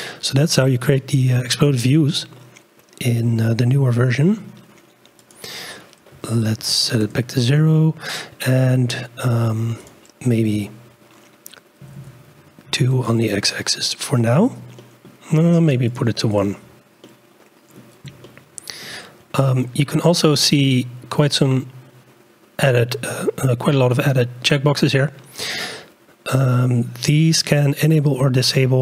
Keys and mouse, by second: 0.6 click, 0.7 click, 0.9 click, 1.0 middle click, 1.3 middle click, 1.8-3.8 drag, 5.3-7.1 drag, 9.9-13.1 drag, 12.1 Tab, 14.8 click, 15.8 click, 17.0-17.8 drag, 18.2 shift+click.